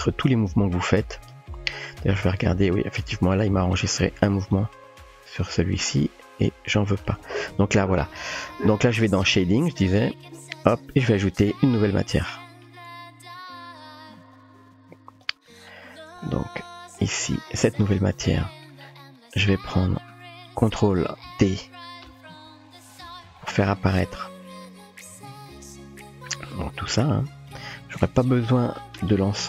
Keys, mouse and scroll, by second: 2.0 click, 4.1-4.5 typing, 7.1 click, 9.9 click, 10.3 typing, 11.5 click, 12.3-13.1 typing, 14.3 click, 15.9-16.6 typing, 17.0 middle click, 18.4 middle click, 19.6 middle drag, 22.7 ctrl+t, 22.7 typing, 25.3 click, 25.4-26.8 typing, 25.6 click, 26.1-26.8 drag, 27.5-29.0 drag, 29.0-29.4 typing.